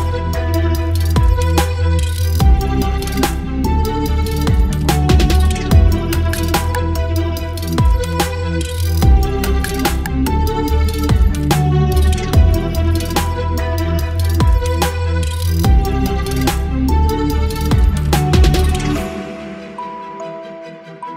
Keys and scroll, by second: 0.7 ctrl+BackSpace, 0.9 space, 1.6 ctrl+BackSpace, 1.9 space, 2.4 b, 4.7 space, 7.3 ctrl+t, 7.6 Return, 11.9 Return, 13.6 Delete, 14.4 space, 15.5 space, 17.5 ctrl+BackSpace, 17.9 space, 19.1 ctrl+BackSpace, 19.6 space, 20.5 ctrl+BackSpace, 20.7 space.